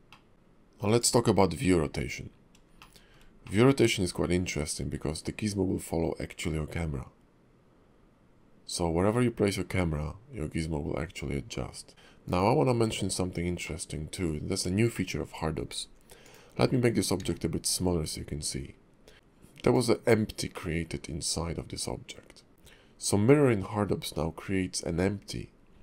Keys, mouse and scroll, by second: 0.1 middle click, 0.3 shift+middle click, 0.3-0.9 scroll up 2, 0.9 click, 2.8 shift+middle click, 3.4 middle click, 11.9 middle click, 12.3 click, 13.6 middle click, 14.4-14.9 scroll up 3, 14.9 shift+middle click, 16.2 click, 17.2 s, 19.1 middle click, 19.6 click, 20.5 middle click.